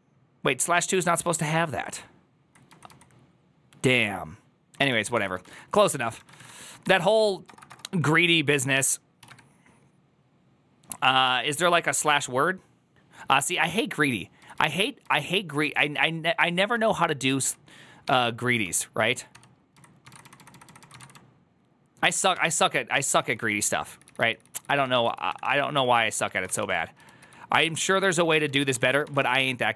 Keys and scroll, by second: 6.4 2, 6.6 3.